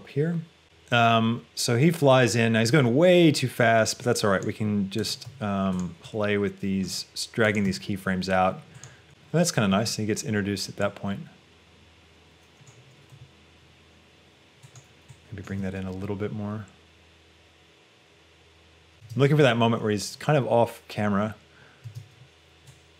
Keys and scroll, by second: 5.3 g, 9.8 space, 13.4 g, 18.9 space, 18.9 g, 22.0 space.